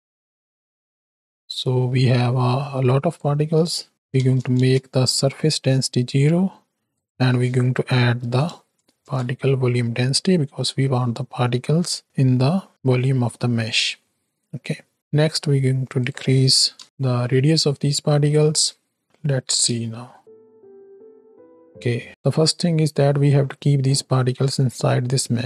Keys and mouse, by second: 3.9 click, 6.9-9.3 drag, 10.4-11.0 middle drag, 11.4 middle click, 13.5-13.9 middle drag, 14.9-16.8 drag, 17.6-18.5 middle drag, 19.0 middle click, 19.8 space, 20.2 shift+Right, 20.2 shift+Left, 22.1 middle click.